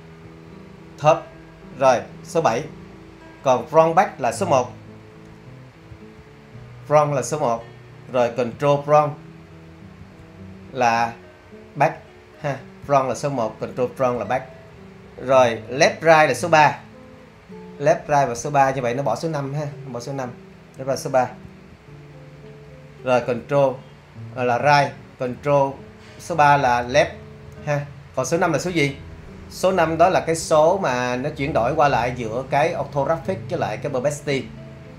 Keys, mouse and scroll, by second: 0.3 7, 5.9 1, 10.0 super+1, 12.8 super+1, 14.2 super+1, 21.4 3, 26.7 super+3.